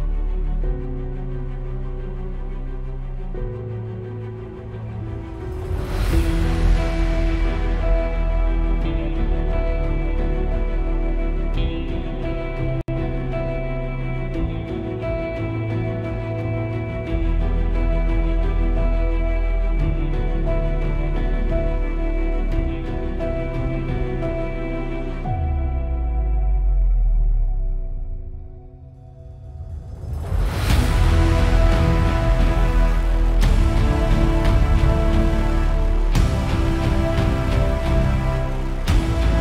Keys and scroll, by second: 35.4 super+=.